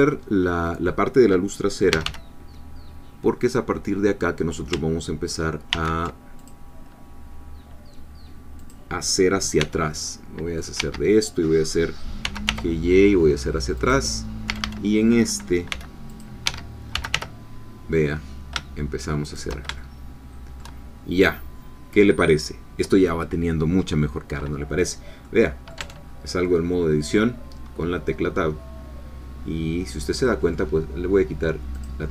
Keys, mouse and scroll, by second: 1.9 g, 3.4 click, 5.7 ctrl+r, 6.4 ctrl+click, 8.6 click, 9.6 c, 9.9 middle click, 10.8 Escape, 12.2 g, 12.5 y, 13.8 click, 14.5 a, 15.7 c, 16.1 click, 16.5 Escape, 16.9 g, 17.1 y, 19.3 shift+click, 19.8 shift+middle click, 21.0-21.7 shift+scroll down 1, 25.2 middle click, 25.8 Tab, 26.0 middle click, 26.0 scroll down 1, 26.4-30.7 middle drag, 31.7 click.